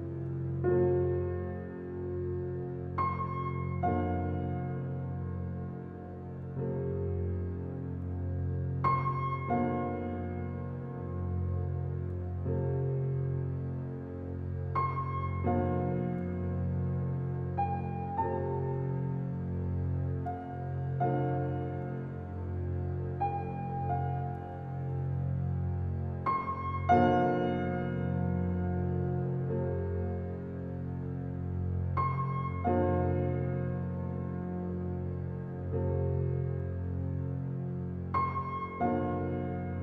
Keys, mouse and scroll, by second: 10.1-12.4 scroll down 1, 12.4 click, 17.1 click, 20.3 right click, 20.9 click, 28.7 alt+click, 29.4 alt+right click, 29.8 alt+middle click, 30.2 alt+click, 37.0 click, 37.9 right click, 38.8 click, 39.4 r.